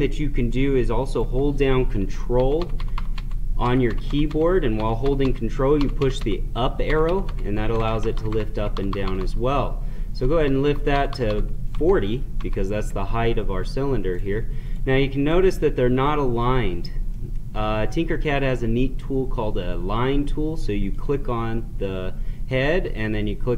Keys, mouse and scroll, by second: 2.4 ctrl+Up, 8.5 ctrl+Up, 14.1 right click, 15.2-17.1 right drag, 17.1-23.2 middle drag.